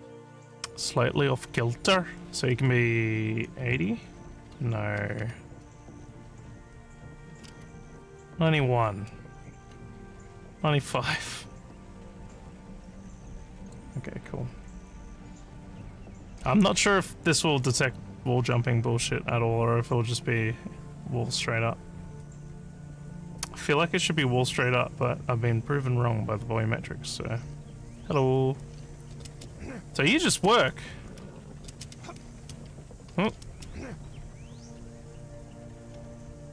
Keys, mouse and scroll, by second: 8.4 1, 10.9 5, 13.5 click, 27.2-34.0 typing.